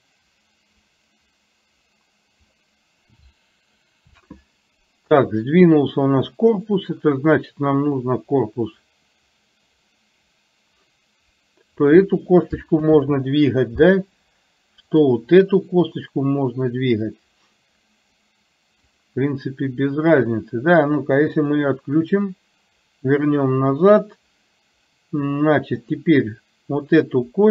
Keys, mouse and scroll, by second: 6.7 click, 8.2-11.9 drag, 14.9 click, 16.2-18.2 drag, 19.1 click, 21.4 click, 25.9 click.